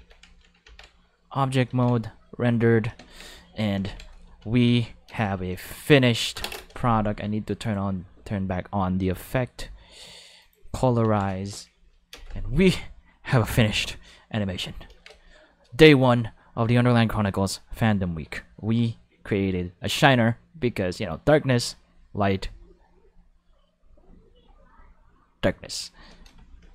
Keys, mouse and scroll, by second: 0.6 Tab, 1.1 click, 1.7 5, 2.3 click, 3.0 ctrl+space, 3.2 ctrl+5, 5.0 space, 5.2 5, 6.5 space, 6.6 5, 7.6 click, 9.0 click, 10.4 click, 11.0 ctrl+5, 12.1 space, 12.2 5, 14.9 ctrl+space, 15.0 ctrl+5, 25.8 space, 26.0 5.